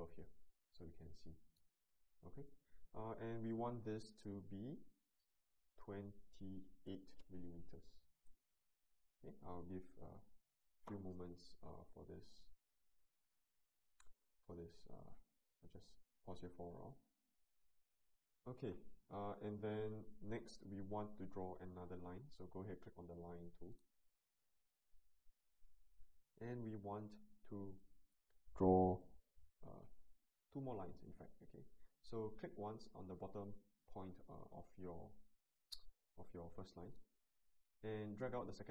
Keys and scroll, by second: 5.8 2, 6.9 8, 8.1 Return.